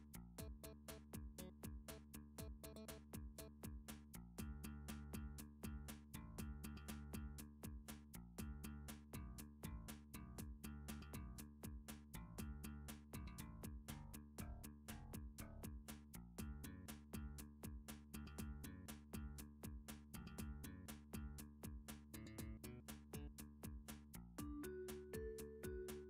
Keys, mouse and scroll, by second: 0.1 shift+middle click, 0.9 s, 2.8 click, 3.4 r, 4.3 click, 4.5 Tab, 7.0 g, 7.9 click, 8.7 r, 9.2 click, 9.9 s, 12.2 click, 12.9 d, 14.3 click, 15.2 s, 16.6 click, 17.0 d, 18.2 click, 18.8 s, 20.1 click, 20.8 shift+middle click, 21.7 d, 22.6 click, 23.2 s, 24.4 click, 25.4 d.